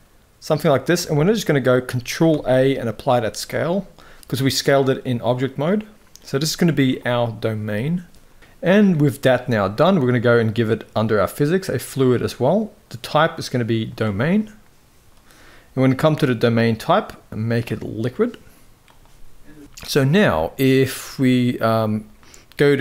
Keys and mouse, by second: 0.8 middle click, 2.0 ctrl+a, 4.7-5.9 middle drag, 12.6-14.0 drag, 15.8-17.6 drag, 19.8 z.